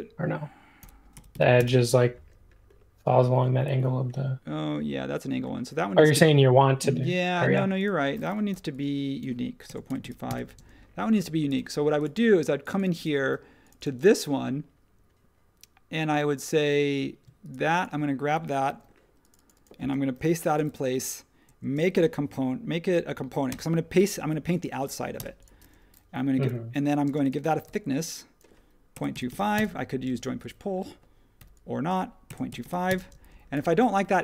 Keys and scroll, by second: 0.8-1.8 typing, 6.1 super+z, 7.5-10.5 typing, 18.6 super+c, 20.1 shift+v, 21.9 shift+g, 23.5 Return, 25.1 Return, 26.1-27.6 typing, 28.7-29.8 typing, 31.3-33.4 typing.